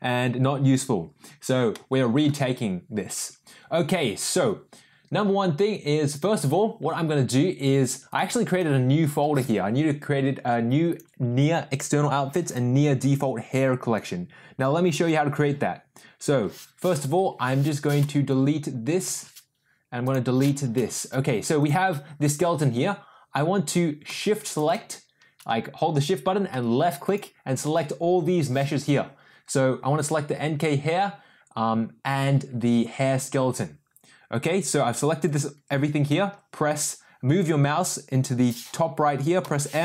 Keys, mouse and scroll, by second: 1.8 middle click, 8.0 click, 10.8 click, 12.4 click, 19.3 Delete, 20.0 click, 21.0 Delete, 21.5 click, 24.5 shift+click, 27.1 shift+click, 39.4 m.